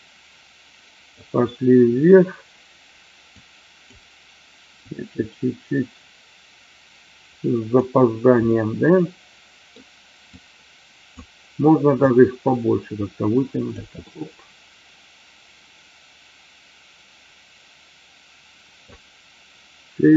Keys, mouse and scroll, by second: 3.4 click, 4.8-7.8 drag, 8.6-9.7 middle drag, 10.3 click, 12.1-13.7 drag, 13.9 scroll up 1, 14.1-18.9 middle drag.